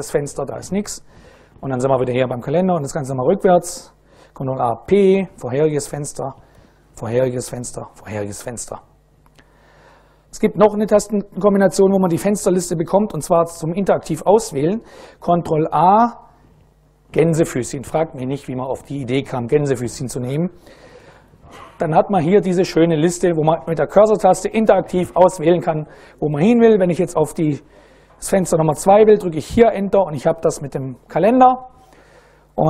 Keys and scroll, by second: 0.6 ctrl+a, 1.1 n, 4.1 ctrl+a, 4.6 p, 5.6 ctrl+a, 5.8-7.3 typing, 7.1 ctrl+a, 15.0 ctrl+a, 16.7 shift+', 21.0 Up, 21.2 Up, 21.5 Down, 21.7 Down, 22.2 Up, 22.5 Up, 22.7 Down, 23.0 Down, 23.2 Down, 23.5 Up, 23.7 Up, 24.2 Down, 25.0 Up, 25.7 Down, 29.2 Return, 32.5 ctrl+a.